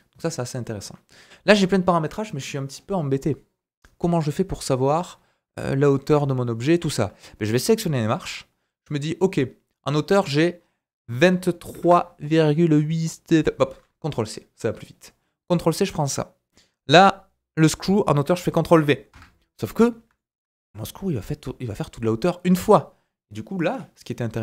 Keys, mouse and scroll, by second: 4.3-5.7 scroll down 5, 5.7-6.1 scroll up 2, 6.3 shift+middle drag, 7.6-10.2 drag, 15.5-17.8 drag, 19.8 scroll down 1, 20.1 shift+middle click, 20.5-22.1 scroll up 2.